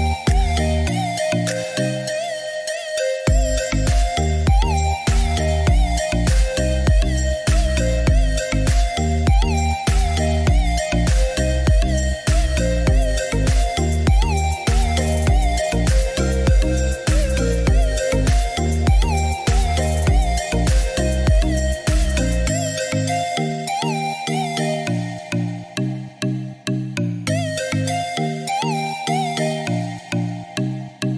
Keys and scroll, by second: 19.4 Escape, 29.4 7, 29.8 0, 30.1 Return.